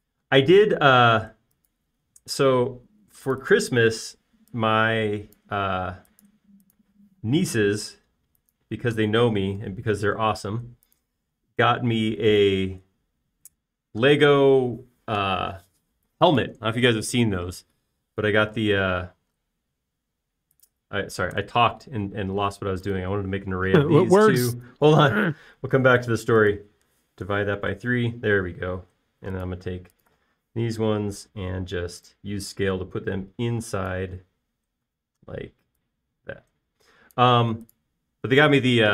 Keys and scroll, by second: 0.0 Up, 3.3 space, 5.0 typing, 6.7 space, 8.1 m, 12.3 alt+space, 22.6 BackSpace, 24.4 m, 28.3 /, 28.6 3, 28.8 Return, 29.9 space, 32.3 s, 38.7 space.